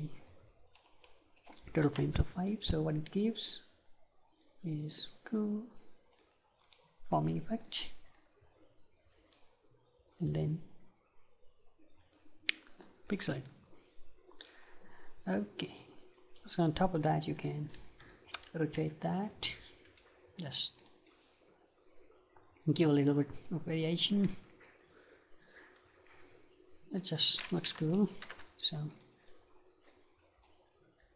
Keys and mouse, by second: 3.6-18.8 right drag, 18.8 r, 19.6-22.4 right drag, 20.8-31.1 drag, 24.4 ctrl+z, 28.7-31.1 right drag.